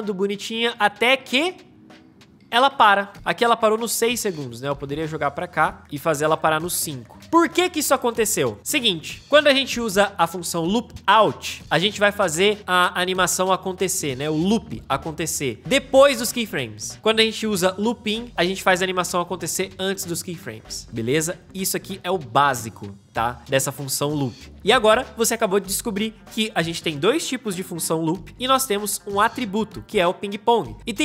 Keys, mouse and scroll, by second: 3.2 space.